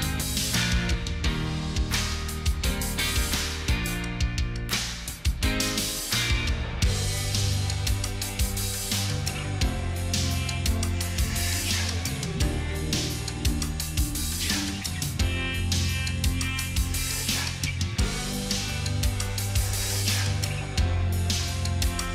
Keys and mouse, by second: 16.0 ctrl+j.